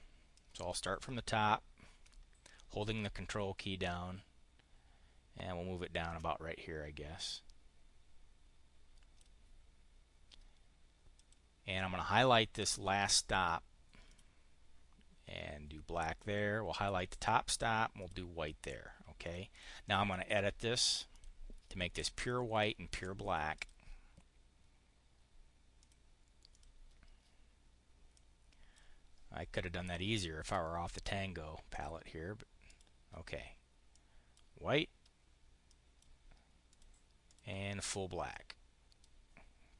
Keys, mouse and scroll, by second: 0.2-9.1 drag, 11.0 click, 13.9 click, 15.9 click, 17.9 click, 19.1 click, 19.5 click, 19.7 click, 21.0 click, 22.5 click, 23.4 click, 25.7 click, 26.3 click, 28.0 click, 31.5 click, 32.5 click, 33.8 click, 35.5 click, 36.5 click, 37.1 click, 38.1 click.